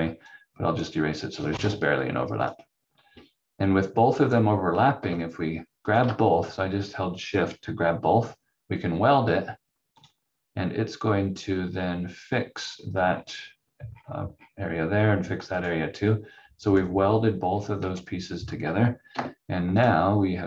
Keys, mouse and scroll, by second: 0.3 click, 4.1-5.0 scroll up 1, 5.8 shift+click, 10.0 click, 11.7 scroll down 1, 13.9-14.2 scroll up 1, 15.5 click, 17.5 scroll down 1, 17.8 v, 19.1 F4, 19.7 click.